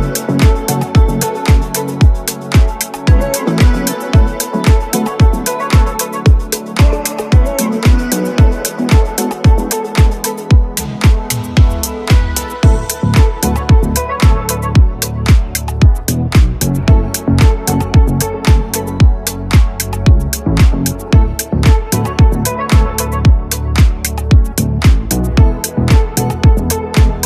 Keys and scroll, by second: 6.1 y, 10.2 r, 11.5 Escape, 14.3 g, 14.5 y, 15.5 Escape, 16.7 r, 20.9 r, 21.8 Escape.